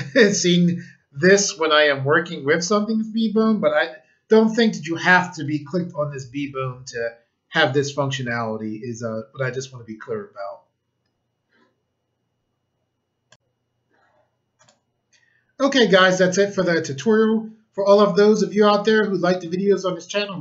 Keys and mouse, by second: 13.3 click, 14.3 click, 14.6 click.